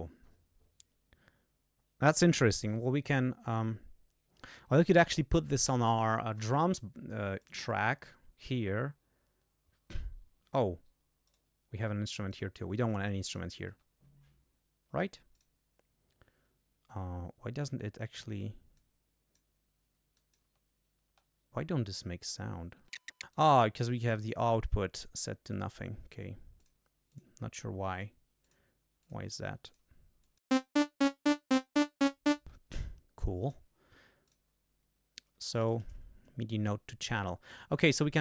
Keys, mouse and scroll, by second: 7.4 click, 12.4 click, 13.6 space, 14.8 space, 18.7 click, 20.1 click, 20.4 space, 21.0 space, 21.9 click, 22.8 space, 22.9 click, 22.9 space, 23.1 click, 23.1 space, 23.2 click, 23.3 space, 24.2 click, 25.5 click, 26.5 click, 27.1 click, 27.9 click, 28.4 click, 29.0 click, 29.6 click, 30.2 click, 30.5 space, 32.4 space, 33.4 click, 34.2 click, 35.5 click, 37.4 click.